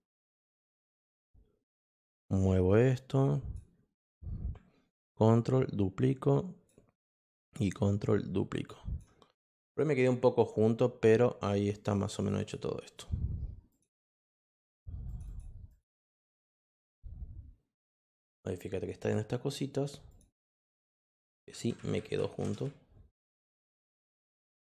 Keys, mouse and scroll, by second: 2.9 click, 5.2-6.6 ctrl+drag, 7.2-8.9 drag, 11.7 click, 11.9 click, 12.1 click, 12.3 click, 12.8 click, 13.7 click, 14.2 click, 15.0 click, 15.2 click, 15.7 click, 16.0 click, 16.2 click, 16.5 click, 16.7 click, 17.9 click, 20.1 click, 24.3 click.